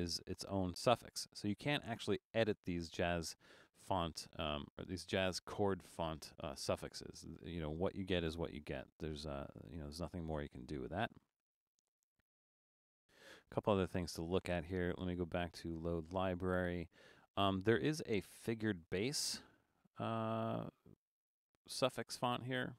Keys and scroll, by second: 12.3 super+z.